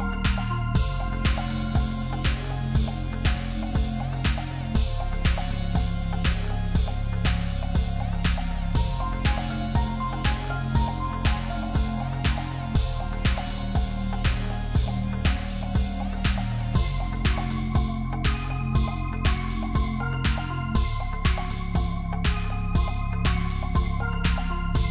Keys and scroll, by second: 21.8 shift+a, 24.0-24.9 typing.